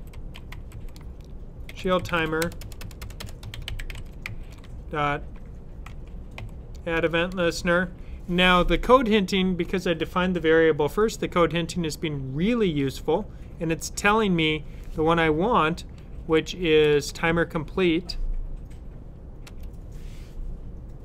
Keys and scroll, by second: 0.0-4.6 typing, 5.7-6.3 typing, 16.1 Down.